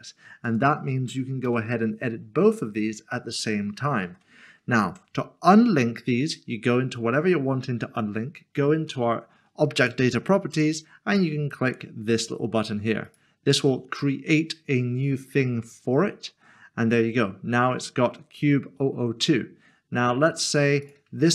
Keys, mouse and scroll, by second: 0.5 click, 1.5 g, 4.0 ctrl+z, 5.5 Tab, 7.3 click, 9.8 click, 13.0 click, 20.8 click.